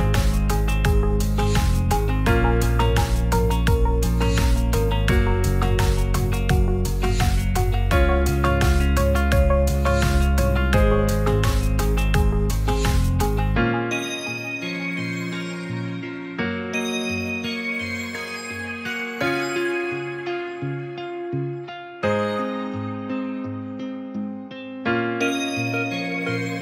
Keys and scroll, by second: 0.8 ctrl+alt+shift+e.